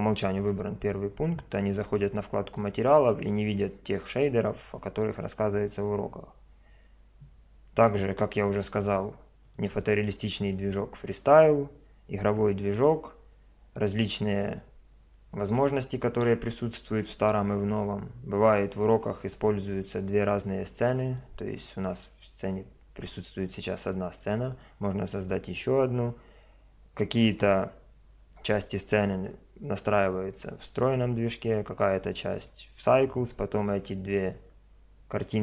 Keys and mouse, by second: 9.4 click, 11.1 middle click, 21.1 click, 22.7 middle click.